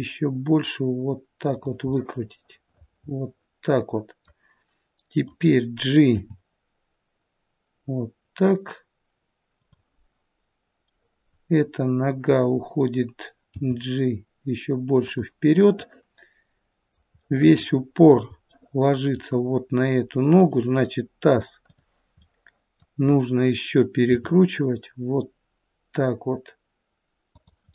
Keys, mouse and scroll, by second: 1.9 middle click, 5.1 click, 6.1 g, 10.8 middle click, 12.2 click, 13.4 g, 15.6 middle click, 17.2 middle click, 19.1 middle click, 19.1-20.4 scroll up 1, 20.4 click, 20.4-21.5 scroll up 2, 22.1 click, 22.1 middle click, 24.0 r, 27.6 middle click.